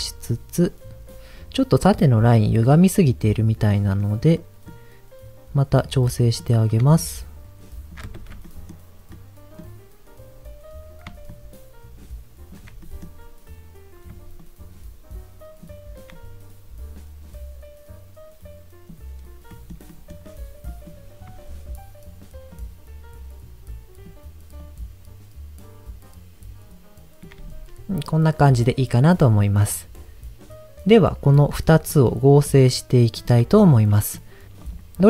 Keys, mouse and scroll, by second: 0.6 click, 1.1 scroll up 4, 1.8 middle click, 3.2 middle click, 3.7 middle click, 4.3 middle click, 6.1 middle click, 6.5-6.8 scroll up 1, 6.9-7.9 shift+drag, 8.4 middle click, 9.1 middle click, 11.3-12.5 shift+drag, 12.8 middle click, 14.4-15.7 shift+drag, 16.1-18.9 drag, 19.2 scroll down 2, 19.5 middle click, 19.9 middle click, 20.2 scroll up 2, 20.7 middle click, 22.5-24.1 shift+drag, 24.6-27.2 shift+drag, 30.8-31.3 scroll down 2, 31.3 ctrl+shift+click, 32.4 ctrl+shift+click, 33.1 ctrl+shift+click, 33.5-34.1 scroll down 2, 33.9 middle click, 34.6 click.